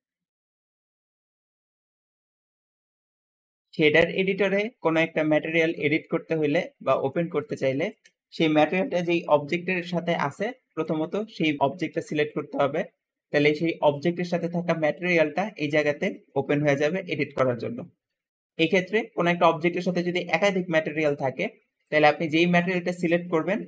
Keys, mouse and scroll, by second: 3.4 `, 4.7 click, 6.9 click, 7.3 click, 7.8 Escape, 11.7 g, 13.7 `, 15.2 click, 16.0 click, 18.5 Escape.